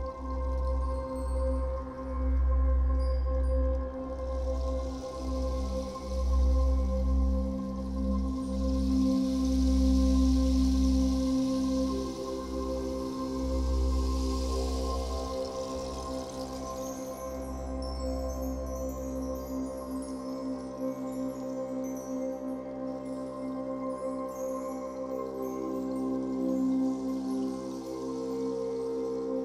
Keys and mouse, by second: 2.8 click, 17.0 Delete, 18.6 click, 19.8-21.2 drag, 23.1-25.8 drag, 27.8-29.4 drag.